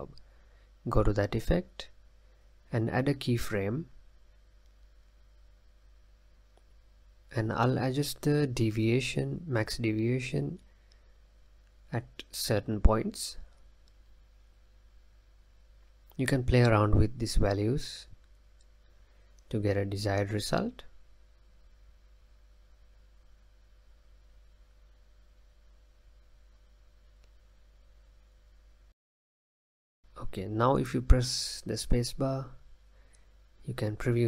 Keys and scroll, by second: 30.6 space, 31.5 space, 33.8 space.